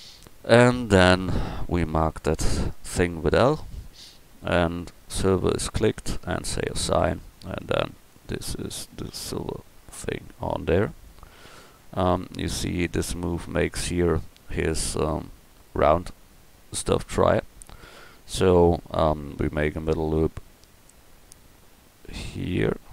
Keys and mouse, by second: 0.6 Tab, 1.1 Tab, 1.5 a, 3.4 l, 6.4 click, 7.5 Tab, 12.0-13.4 right drag, 13.4 Tab, 14.6 middle click, 19.9 ctrl+r.